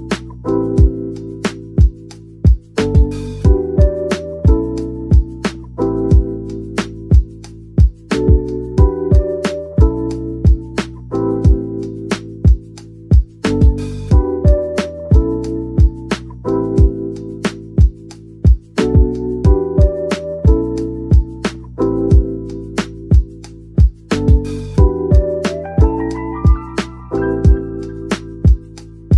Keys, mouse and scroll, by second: 2.3-3.3 typing, 3.8 Return, 4.6 typing, 7.1-7.5 typing, 8.8 middle click, 9.8-11.4 typing, 12.6-13.5 typing, 14.5-16.2 typing, 18.2 typing, 20.3-21.7 typing, 24.4 shift+click, 25.4-25.8 typing, 27.3-27.6 typing.